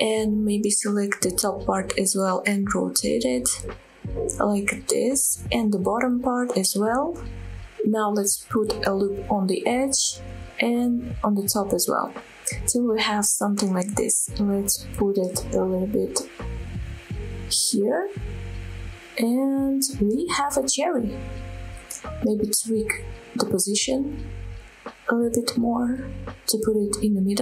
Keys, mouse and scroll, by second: 1.6 click, 2.1 r, 2.8-4.3 scroll up 2, 4.7 click, 5.1 r, 5.9 click, 7.5 click, 7.9 ctrl+r, 10.6 click, 11.3 ctrl+r, 12.3 click, 13.6 click, 14.0 click, 14.8 a, 15.4 g, 17.7 shift+click, 18.3 Tab, 18.5 click, 18.8-19.5 scroll down 1, 19.5 click, 19.8-21.0 middle drag, 21.4 KP_7, 22.0 click, 22.3-22.7 scroll up 3, 22.7 shift+middle drag, 23.4 g, 24.3 shift+click, 24.6-25.4 middle drag, 25.5 middle click, 26.0 ctrl+z, 26.3 shift+middle drag, 26.6 scroll up 1, 26.7-27.3 middle drag.